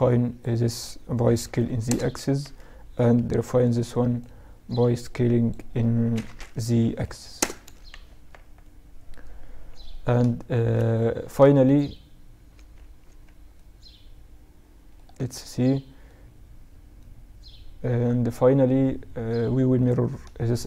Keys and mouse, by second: 0.3 s, 1.5 a, 2.3 b, 5.8 s, 6.7 z, 7.2 Tab, 10.4-14.5 middle drag, 10.8-11.7 right drag, 11.7 Tab, 12.2 Tab, 14.3 Tab, 14.7-18.2 middle drag.